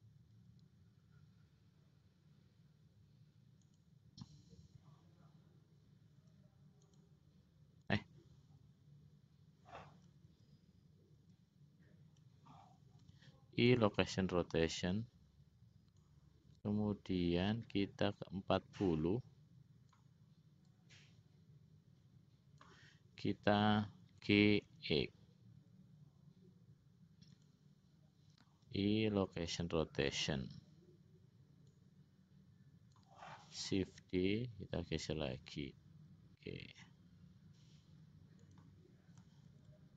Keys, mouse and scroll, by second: 6.3 i, 10.7 ctrl+z, 11.7 ctrl+z, 13.2 i, 16.3-20.3 drag, 21.1-23.0 drag, 24.4 g, 28.8 i, 31.8-33.2 drag, 34.3 shift+d, 39.8 shift+d.